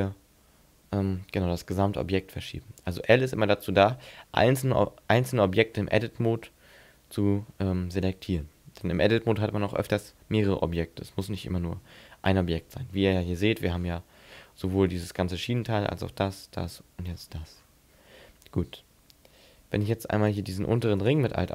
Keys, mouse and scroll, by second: 2.9 right click, 12.9-13.3 scroll up 5, 13.3-14.6 scroll down 14, 17.1-19.3 scroll up 9, 20.3 right click, 21.0 alt+right click.